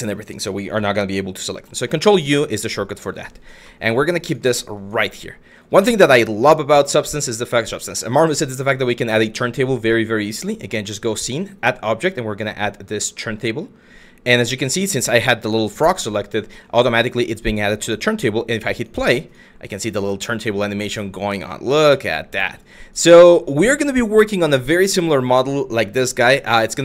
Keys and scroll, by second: 1.3 ctrl+u.